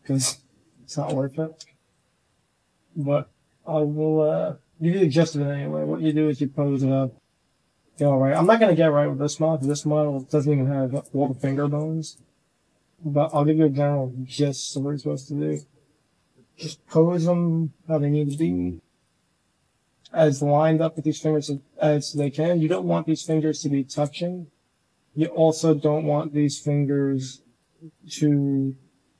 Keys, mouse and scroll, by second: 0.3 drag, 1.3 shift+drag, 2.3 r, 3.0 g, 4.3-4.7 drag, 4.9 shift+drag, 5.3 g, 6.2-6.8 drag, 7.0 g, 8.7 g, 9.5-10.0 drag, 10.1 g, 11.0 drag, 11.5 s, 12.1 g, 13.7 drag, 14.1 shift+drag, 14.9-15.4 drag, 15.7 r, 18.3 g, 19.0 drag, 19.2 right drag, 19.7 click, 19.9 r, 20.7 s, 21.5 g, 22.2-22.6 drag, 22.7 r, 23.3 g, 24.6 middle drag, 24.8 drag, 26.6-27.0 middle drag, 27.4 click, 28.8-29.1 drag.